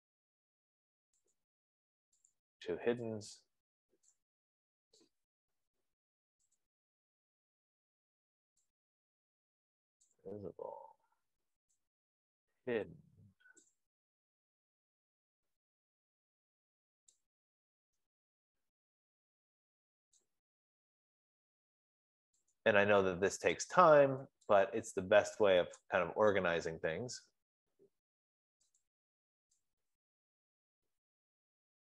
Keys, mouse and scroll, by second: 0.1 click, 1.8 click, 2.5 shift+click, 4.5 click, 7.2 click, 10.6 click, 13.9 click, 20.6 click, 23.1 click, 24.1 shift+click, 26.2 click, 29.4 click, 30.6-31.9 drag.